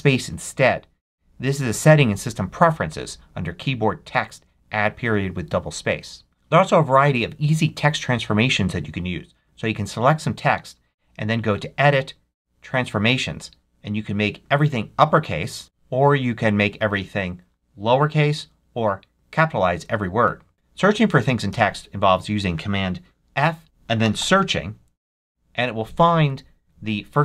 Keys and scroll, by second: 15.6 super+z, 21.4 super+f, 23.6-24.6 typing.